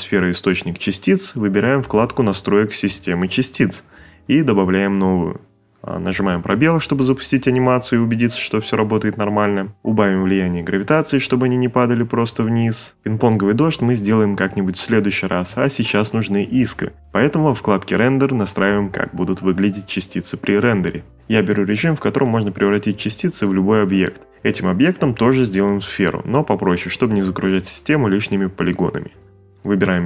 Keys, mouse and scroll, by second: 5.0 space, 7.2 space, 7.8 shift+middle click, 17.1 click, 18.7 click, 20.7 click, 21.5 5, 22.1 click, 23.2 4, 23.3 click, 25.8 click, 26.0-28.2 typing, 26.7 click, 27.3 click, 29.7 click, 29.8 space.